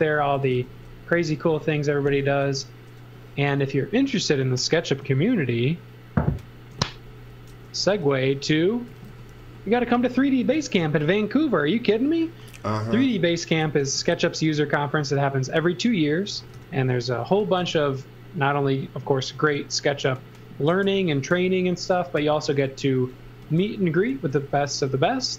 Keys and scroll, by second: 0.0-1.0 typing, 2.4 shift+1, 3.5 m, 7.8-11.1 typing, 13.8 l, 16.1-17.6 typing, 20.7 space, 22.2 super+c, 22.9-24.9 typing.